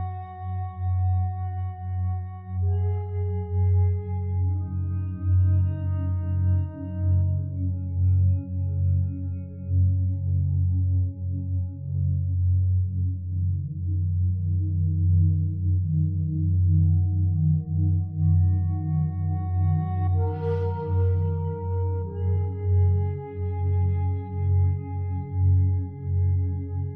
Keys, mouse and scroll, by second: 13.7 0, 13.9 ., 14.1 5, 14.4 Return.